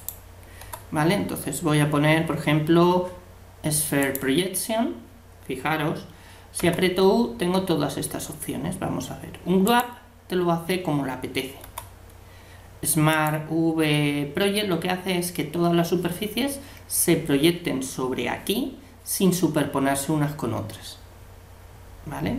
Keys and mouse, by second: 0.6 u, 6.6 u, 11.6 u.